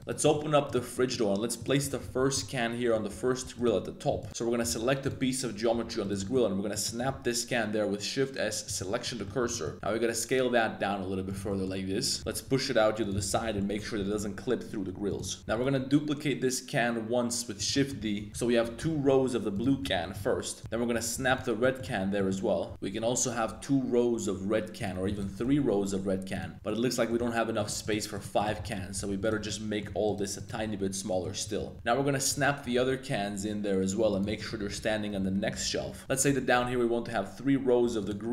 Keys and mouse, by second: 0.0 click, 0.0 0, 0.2 middle click, 0.6 drag, 0.9 middle click, 1.5 click, 2.0 shift+s, 2.8 middle click, 3.1 Tab, 3.4 3, 3.5 click, 4.1 shift+s, 4.6 shift+s, 5.7 Tab, 6.0 click, 6.3 middle click, 6.8 middle click, 7.1 shift+s, 9.0 middle click, 9.5 shift+middle drag, 9.7 s, 11.3 click, 11.5 shift+middle click, 11.7 middle click, 12.2 g, 12.3 x, 13.0 click, 13.2 middle click, 13.6 middle click, 14.0 g, 14.1 z, 15.1 shift+click, 15.2 middle click, 15.4 x, 15.4 g, 15.6 x, 17.6 click, 17.7 middle click, 18.3 middle click, 18.3 g, 18.3 y, 18.8 x, 19.5 click, 19.8 shift+s, 20.6 click, 20.6 shift+s, 21.6 middle click, 22.1 middle click, 22.7 x, 24.8 click, 25.0 shift+d, 25.2 g, 25.4 x, 26.3 click, 26.6 middle click, 27.5 shift+click, 27.8 shift+click, 28.1 shift+click, 28.3 shift+click, 29.4 middle click, 30.0 shift+drag, 30.3 shift+click, 31.0 middle click, 31.5 s, 32.6 g, 32.7 z, 34.1 click, 34.3 shift+middle click, 34.6 g, 34.7 y, 35.1 x, 36.3 y, 37.0 x, 38.0 click.